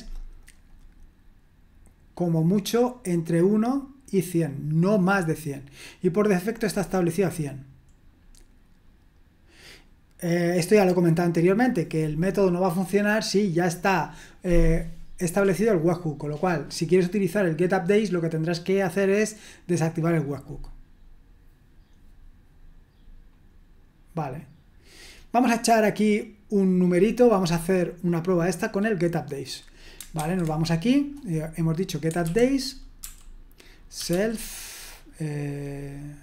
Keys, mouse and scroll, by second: 0.4-5.4 drag, 6.3 click, 7.1-8.2 scroll down 2, 8.2-9.5 scroll down 1, 9.5-10.7 scroll down 1, 10.7-12.2 drag, 27.6-30.2 scroll up 2, 30.2 super+1, 30.9-32.0 drag, 32.0 Escape, 32.2-34.5 typing.